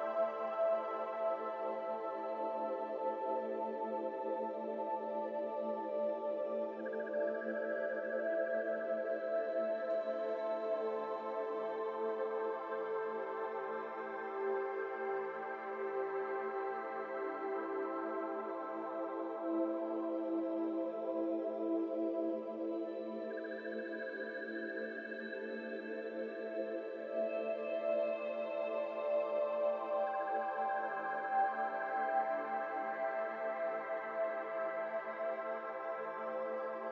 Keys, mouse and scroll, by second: 0.1 alt+z, 0.5 alt+click, 1.0 alt+z, 1.2-4.4 typing, 2.9 alt+z, 3.5 shift+middle click, 3.7 scroll up 1, 5.9 g, 7.7 middle click, 8.3 alt+z, 8.7 middle click, 9.4 alt+click, 9.7 scroll down 1, 9.7-11.5 middle drag, 11.5 alt+z, 12.1 alt+z, 12.3 g, 14.3 middle click, 15.1 e, 17.6 i, 19.7 alt+z, 20.5 alt+shift+click, 21.0 alt+z, 21.3 g, 23.7 alt+z, 24.0 alt+click, 24.4 alt+z, 25.1 e, 27.2 alt+z, 27.4-28.9 middle drag, 28.9 alt+click, 29.8 g, 31.4 alt+z, 31.7 shift+middle click, 32.0 Tab, 32.1 middle click, 32.3 scroll down 4, 32.6-33.4 middle drag, 33.4 Tab, 33.6 middle click, 33.8 scroll up 4, 34.0 alt+z, 34.6 alt+shift+click, 35.0 middle click, 35.8 alt+z, 36.1 middle click, 36.4-36.8 scroll down 2, 36.8 middle click.